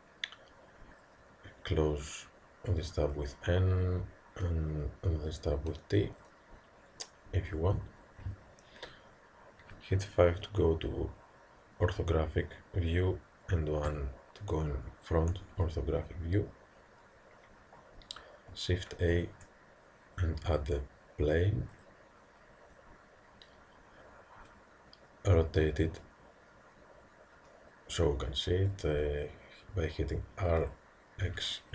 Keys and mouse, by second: 3.2 n, 5.6 t, 10.3 KP_5, 13.9 KP_1, 19.2 shift+a, 30.5 r.